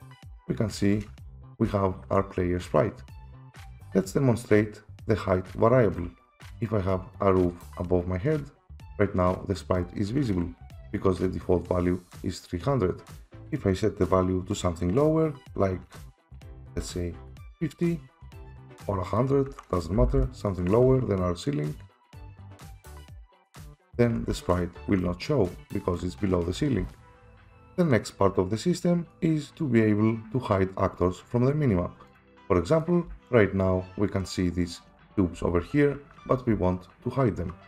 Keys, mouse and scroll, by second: 1.4-3.8 typing, 1.6 right click, 3.8 Escape, 6.3 click, 6.3-7.1 typing, 7.1 click, 8.4 click, 10.6 Escape, 12.0 click, 13.0 F7, 13.0 F6, 13.7 click, 16.7-17.3 typing, 17.8 click, 19.2 click, 19.2-20.0 typing, 20.5 click, 21.8 click, 22.2 click, 23.1 click, 23.5-26.8 typing, 23.7 click, 27.0 F5, 27.0 F4, 27.6 Escape, 31.0 right click, 32.2 click, 32.8 click, 33.0-34.2 typing, 35.3-36.5 typing.